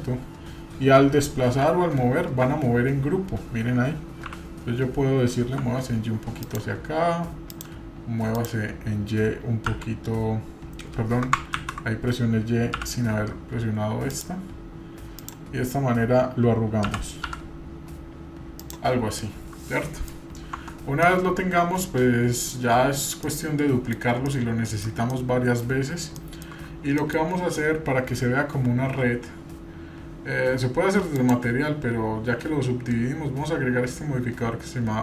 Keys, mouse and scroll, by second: 7.5 click, 8.3 click, 9.7 y, 11.8 ctrl+z, 12.8 g, 15.2 click, 16.9 g, 19.2-20.1 middle drag, 20.6 Tab, 21.0-22.6 middle drag, 22.6-23.2 scroll down 1, 23.2 scroll down 1, 23.3-24.0 middle drag, 24.3-25.6 shift+middle drag, 26.2 shift+middle click, 27.0 middle drag, 31.2-35.0 drag.